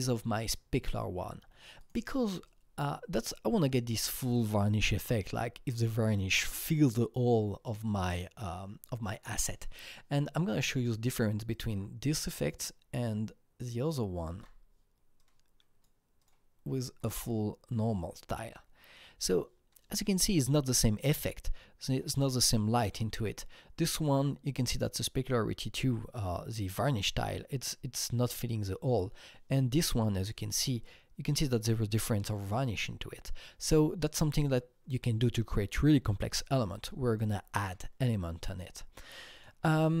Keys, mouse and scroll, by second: 2.4-6.6 alt+drag, 10.8 alt+click, 11.5 alt+click, 12.4-13.9 drag, 14.3 alt+Tab, 15.2-17.0 drag, 16.2 click, 19.6-22.2 drag, 22.5-24.3 scroll up 4, 29.2-32.5 drag, 29.2 scroll up 1, 31.9-32.5 scroll down 2, 32.5-34.1 scroll down 10, 34.1-34.6 scroll up 2, 36.8-39.3 drag, 38.8-39.3 scroll up 2, 39.6-40.0 scroll up 6.